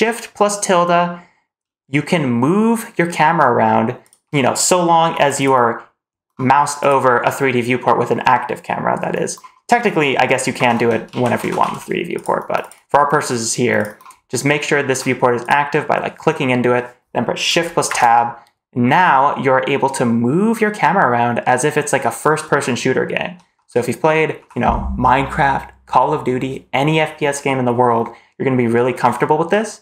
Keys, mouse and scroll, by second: 6.7 click, 10.4 shift+`, 14.4 shift+middle click, 15.3 click, 17.7 shift+`.